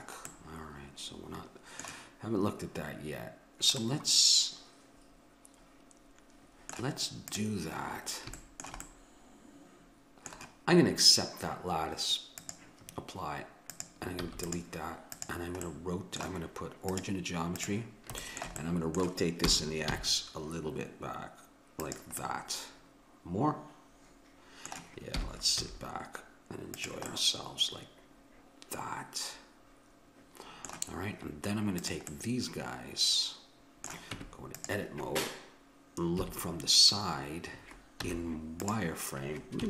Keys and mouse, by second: 0.3-4.5 middle drag, 4.9 middle click, 7.3-9.2 drag, 8.9 right click, 9.2 middle click, 12.4-17.6 drag, 14.3 x, 15.7-17.5 middle drag, 19.5 r, 23.1 middle click, 25.2 r, 27.2 middle click, 31.8-33.6 drag, 33.6 middle click, 34.1 Tab, 36.2 KP_3, 38.1 z.